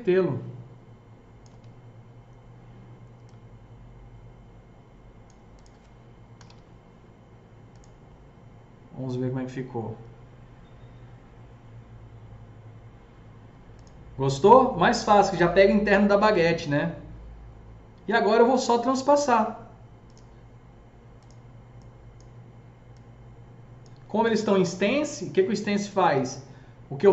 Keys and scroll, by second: 1.7 w, 6.1-6.8 typing, 8.3-9.1 typing, 24.8 F3.